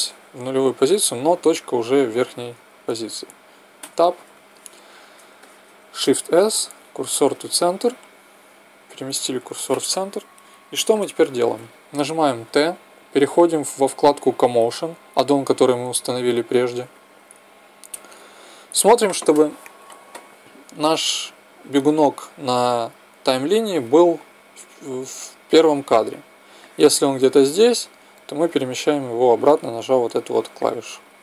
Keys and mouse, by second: 3.8 Tab, 6.1 shift+s, 12.0 t, 14.4-16.1 drag, 26.5-28.5 drag, 30.5-31.2 drag.